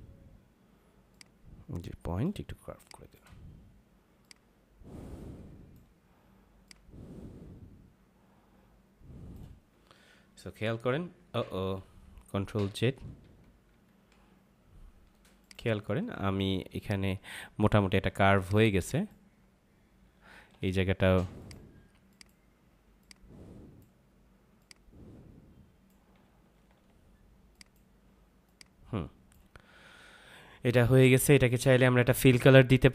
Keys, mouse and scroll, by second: 1.4 click, 2.5 space, 2.7 click, 3.0 space, 4.2 click, 10.4 Down, 13.2 ctrl+z, 15.4 click, 15.7 ctrl+-, 16.7 click, 17.7 ctrl+=, 18.4 click, 20.1 ctrl+=, 21.3 click, 26.2 -, 27.5 click, 29.7 ctrl+-.